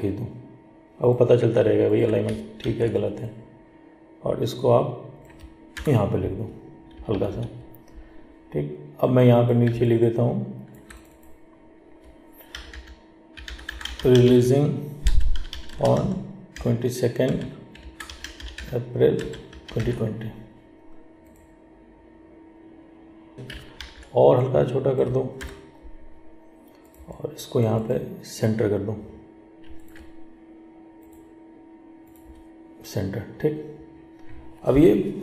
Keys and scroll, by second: 2.8 ctrl+t, 23.3 ctrl+t.